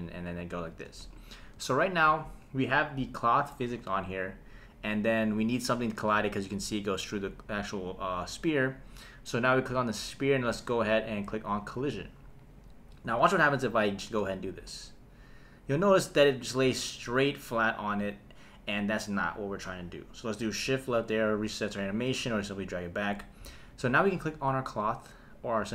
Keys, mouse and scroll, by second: 0.7 space, 1.3 shift+Left, 6.9 click, 11.5 click, 14.0 space, 16.1 space, 20.8 shift+Left, 23.7 click.